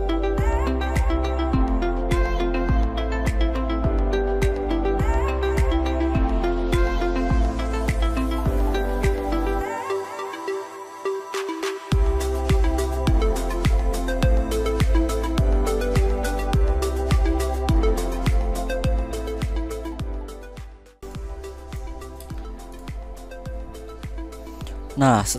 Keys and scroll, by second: 2.6 ctrl+a, 2.9 ctrl+f, 5.8 Right, 5.9 2, 6.0 Return, 6.5 ctrl+g, 6.6 ctrl+v, 6.8 ctrl+g, 8.0 ctrl+x, 9.6 ctrl+g, 10.3 ctrl+g, 10.7 ctrl+x, 11.0 ctrl+v, 11.3 ctrl+u, 11.7 ctrl+x, 11.9 ctrl+f, 14.8 ctrl+a, 14.9 ctrl+f, 17.4 shift+Right, 17.7 0, 17.9 BackSpace, 18.0 Return, 18.2 ctrl+a, 18.3 ctrl+g, 18.4 ctrl+v, 18.7 ctrl+g, 19.2 ctrl+x, 19.6 ctrl+v, 19.9 ctrl+g, 20.8 z, 21.9 space.